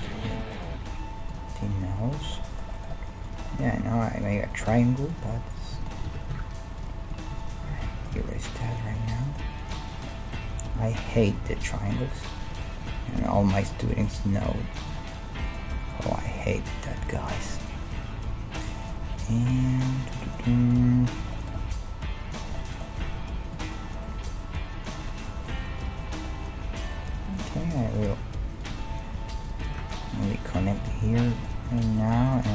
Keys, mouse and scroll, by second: 0.3-3.5 middle drag, 0.3-2.0 right drag, 0.7 g, 1.8 g, 3.2 right click, 3.7 e, 4.7 ctrl+Tab, 6.1 f, 6.4 ctrl+Tab, 6.9-9.2 right drag, 7.7 f, 7.9-10.4 middle drag, 8.2 ctrl+Tab, 9.6 right click, 10.4 g, 12.2-13.9 right drag, 12.6 g, 13.4 g, 13.9-16.7 middle drag, 14.5 g, 20.1 middle click, 20.7-22.8 right drag, 21.3-24.3 middle drag, 21.5 g, 23.0 g, 25.8-27.5 right drag, 26.3 g, 28.0-31.3 right drag, 28.9 e, 29.8 ctrl+Tab, 31.0 f.